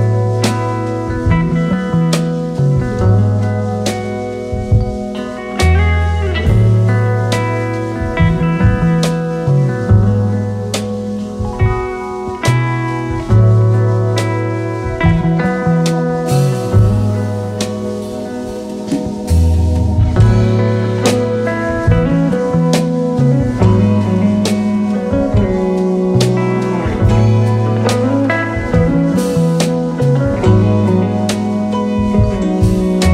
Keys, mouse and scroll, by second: 1.5 space, 1.7 double click, 2.1-3.0 space, 3.5 alt+scroll down 1, 8.6-11.7 space, 14.2 space, 14.6 space, 14.9 space, 15.2 alt+scroll up 1, 17.4 alt+scroll up 2, 20.2 alt+scroll down 2, 20.4 space, 21.3 space, 21.7 space, 21.8 double click, 21.9-23.2 space.